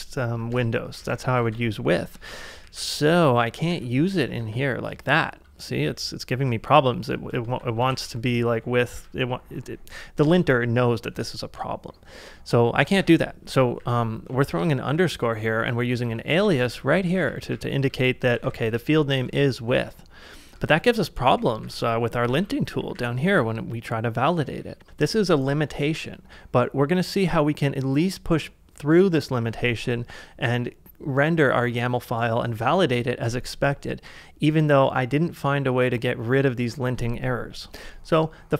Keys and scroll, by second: 0.0-3.2 typing, 1.6 ctrl+c, 5.9-8.9 typing, 13.0 u, 13.8 j, 14.3 k, 15.5-18.9 typing, 19.7 ctrl+c, 20.8-22.6 typing, 23.3 ctrl+c, 24.2-24.5 typing.